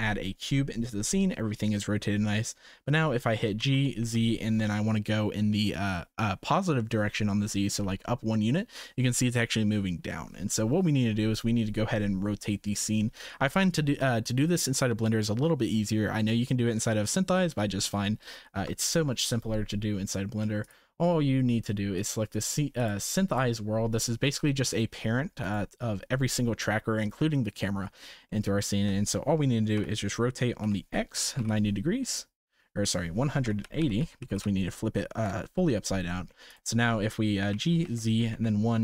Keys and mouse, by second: 3.6 g, 18.0-18.6 shift+middle drag, 22.0 click, 24.2 g, 28.3-28.8 shift+middle drag, 29.7 r, 36.1 shift+middle click, 36.5 click, 37.5 g.